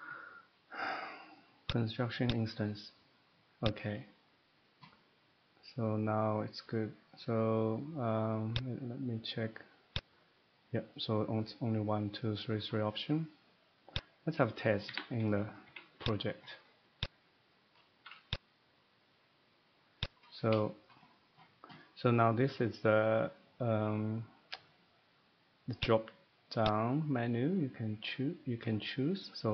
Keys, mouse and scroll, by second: 3.0 click, 3.0 middle click, 3.6 click, 8.3 click, 8.5 click, 8.7 click, 10.0 click, 13.6 click, 13.9 click, 14.5 middle click, 14.8 Escape, 15.2 Escape, 15.5 middle click, 15.7 Escape, 16.1 click, 17.0 click, 18.3 click, 20.1 click, 20.3-20.7 scroll down 3, 21.0 shift+middle click, 21.3 middle click, 23.7 shift+middle click, 25.8 click, 26.7 click.